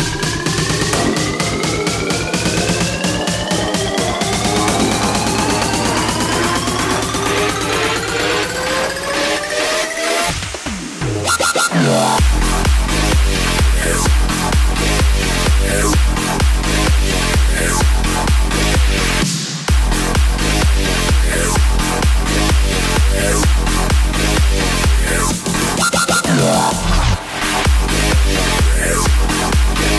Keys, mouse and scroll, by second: 2.1 KP_0, 3.2 s, 7.2 KP_0, 8.0-8.7 scroll down 2, 8.7-10.4 scroll down 1, 10.4-11.4 scroll down 1, 11.4-12.2 scroll down 1, 12.2-13.3 scroll down 1, 13.3-14.2 scroll down 1, 14.2-15.7 scroll down 1, 15.7 click, 20.7 click, 22.6 KP_7, 23.4-24.4 scroll up 2, 25.2 s, 27.5 KP_1, 28.4-29.4 shift+middle drag, 29.4 click.